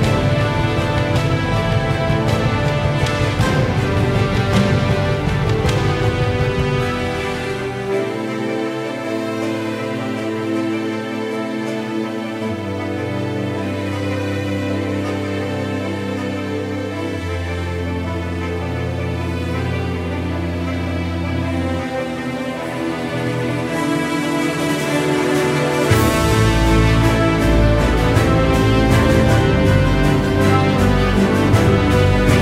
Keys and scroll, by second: 3.8 ctrl+z, 26.8 ctrl+z.